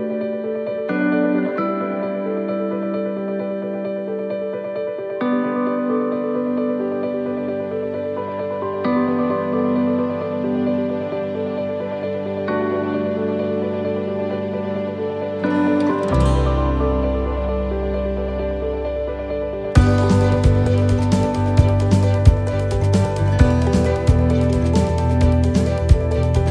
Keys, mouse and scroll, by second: 2.5 shift+middle click, 3.3 middle click, 5.0 s, 9.9 middle click, 10.2-10.5 scroll up 2, 10.5 middle click, 11.3 middle click, 12.3 shift+middle click, 12.3 shift+middle click, 12.9 scroll down 2, 13.2 shift+middle click, 14.1 scroll up 3, 14.1 shift+middle click, 14.5 shift+middle click, 16.2 shift+middle click, 16.8-17.2 scroll down 2, 17.3 shift+middle click, 18.0 middle click, 19.7 click, 23.4 click, 23.4 middle click, 25.5 s.